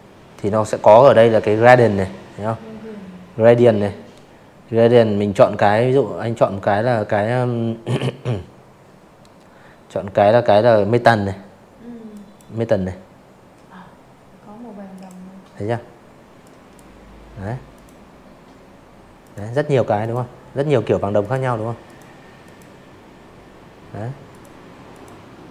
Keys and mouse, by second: 9.0 click, 11.8 click, 13.3 click, 14.6 click, 16.1 click, 16.9 click, 18.1 click, 18.8 click, 19.3 click, 21.2 click, 21.8 click, 22.6-24.6 typing, 22.7 click, 23.1 click, 23.4 click, 23.7 click, 24.1 click, 24.4 click, 24.7 click.